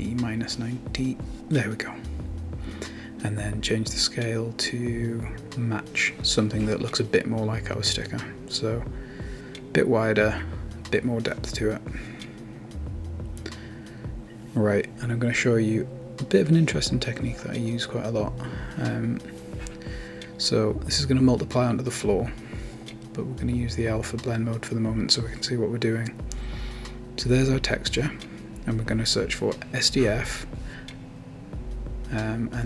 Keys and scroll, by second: 0.5 typing, 3.3-4.6 typing, 5.5 Return, 25.3-26.2 typing, 30.9 Return.